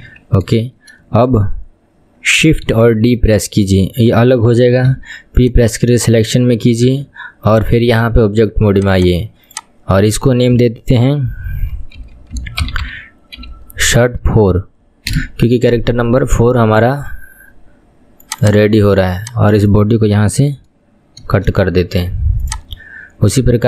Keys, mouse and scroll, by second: 0.0 KP_1, 2.7 shift+d, 6.9 Tab, 7.5 click, 8.7 click, 9.0-12.1 drag, 18.3 click, 18.5-21.6 drag, 23.3 click.